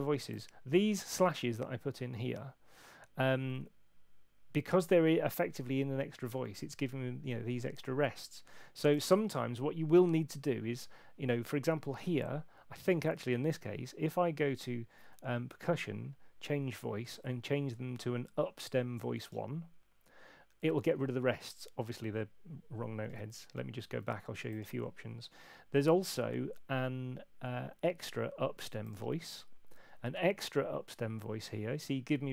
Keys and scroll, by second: 23.1 super+z.